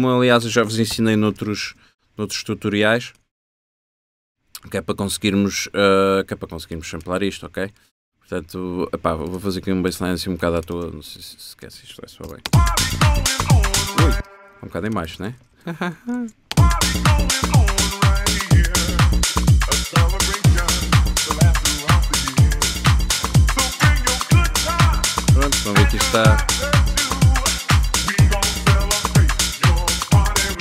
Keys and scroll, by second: 1.0 shift+super+m, 1.7 super+b, 2.2 super+b, 2.4 typing, 10.8 b, 11.8 super+b, 12.3 super+l, 12.5 super+space, 13.1 shift+Tab, 14.2 shift+space, 15.0 super+space, 15.1 super+a, 15.6 shift+super+Up, 16.2 shift+Tab, 16.6 shift+space, 17.3 space, 18.9 BackSpace, 30.4 BackSpace.